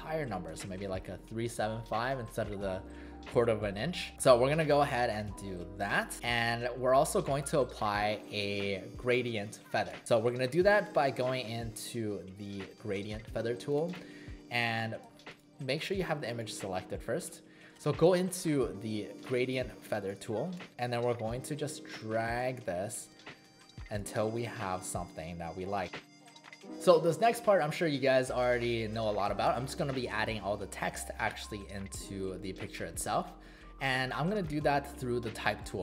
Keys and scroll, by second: 10.7 space, 15.0 v.